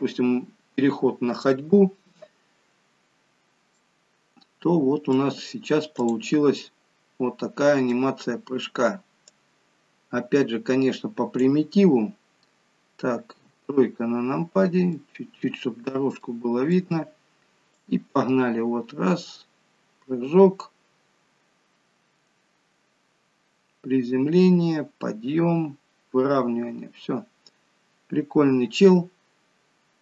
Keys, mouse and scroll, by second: 3.3-3.9 scroll down 2, 3.7 middle click, 6.0 click, 6.6 middle click, 9.4 click, 13.3 KP_3, 14.9 middle click, 16.2 middle click, 17.8 click.